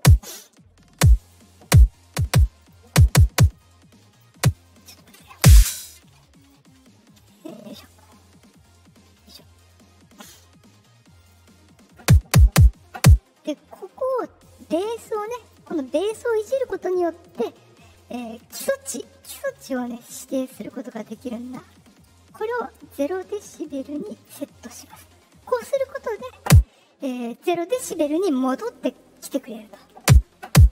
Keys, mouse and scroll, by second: 1.0 click, 2.5 click, 3.5-4.1 drag, 5.2 space, 5.5 space, 6.3 click, 7.6 click, 9.1 click, 10.2 click, 11.1 click, 14.4-15.4 drag, 16.5 click, 19.5-24.2 drag.